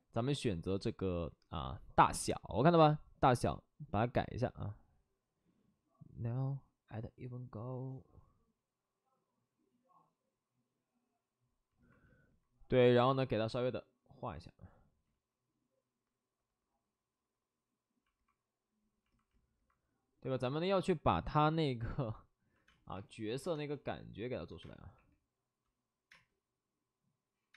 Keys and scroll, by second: 15.1 ctrl+z, 22.6 space, 22.9 2, 24.6 space, 24.9 3, 26.1 space.